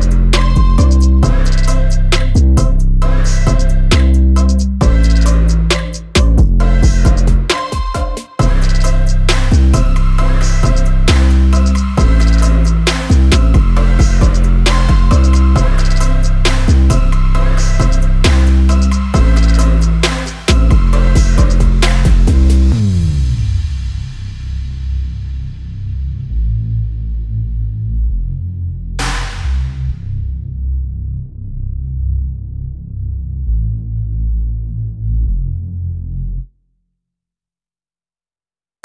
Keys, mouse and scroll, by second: 13.9 shift+click, 15.3 click, 16.7 ctrl+g, 17.4 click, 21.6 ctrl+g, 22.3 click, 24.0 shift+click, 24.6 shift+click, 25.3 shift+click, 26.5-38.8 drag.